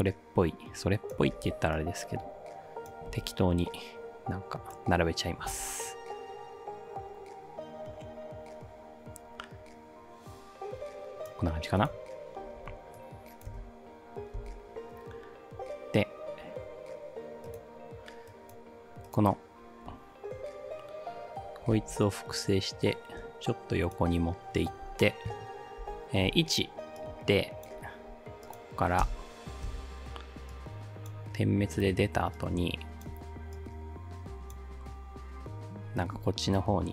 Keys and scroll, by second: 1.4 ctrl+d, 3.1 ctrl+d, 5.6 ctrl+d, 13.5 space, 14.4 space, 21.8 ctrl+d, 25.8 p, 29.1 space, 29.7 space.